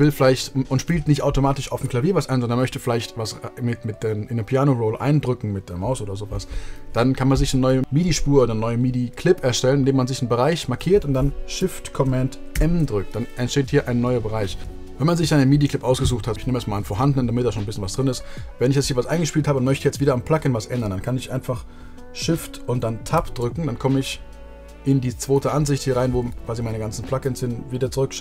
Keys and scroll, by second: 12.1 shift+super+m, 23.1 shift+Tab.